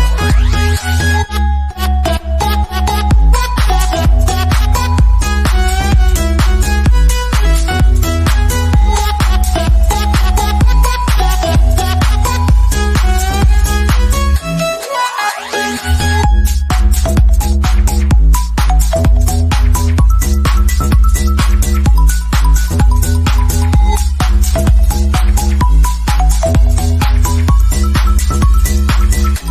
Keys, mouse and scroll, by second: 5.0 click, 5.9 scroll down 1, 6.4 shift+middle click, 9.1 scroll up 1, 9.8-11.3 shift+middle drag, 11.9 scroll down 1, 12.2-14.0 middle drag, 14.6 scroll down 1, 15.3-16.4 shift+middle drag, 16.4-16.8 scroll down 1, 16.8-17.9 shift+middle drag, 17.9 scroll up 1, 18.6 middle click, 19.3 scroll down 1, 19.7-21.3 shift+middle drag, 21.3 click, 26.5 click, 27.6 scroll down 1, 28.3 middle click, 28.9 scroll down 1.